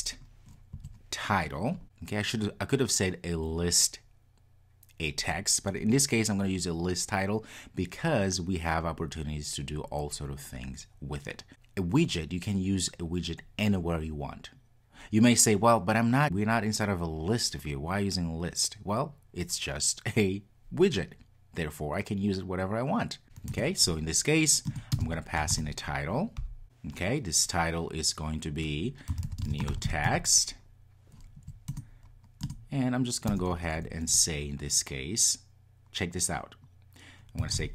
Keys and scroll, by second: 23.6 Return, 31.7 Return.